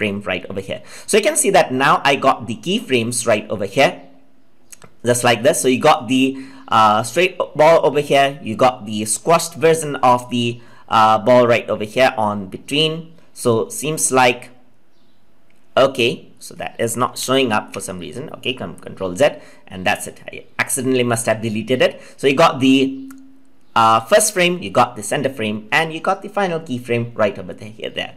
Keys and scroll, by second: 17.1 ctrl+z.